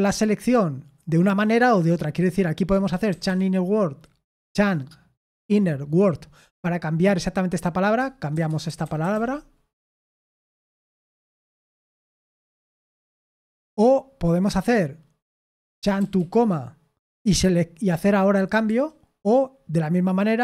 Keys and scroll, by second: 2.8-3.7 typing, 8.1-12.6 typing, 15.5-16.6 typing, 18.3 Escape, 18.6 u, 20.3-20.4 typing.